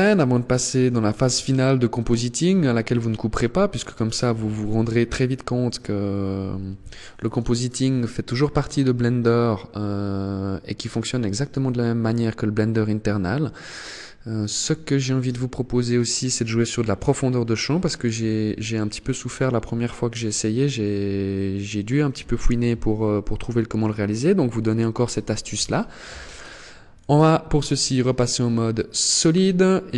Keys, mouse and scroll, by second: 0.3 shift+middle click, 26.0 click, 27.0 click, 27.7 scroll down 2, 28.4-29.1 scroll up 1, 29.1 right click.